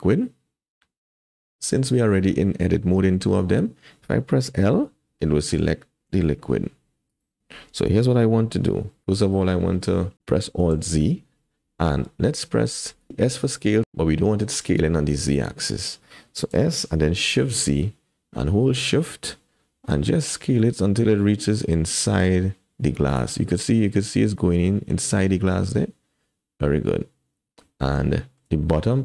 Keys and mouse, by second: 1.3 middle click, 4.7 l, 6.3 g, 9.4 middle click, 10.1 KP_1, 10.7 alt+z, 13.1 s, 13.8 s, 16.5 s, 28.1 shift+middle click.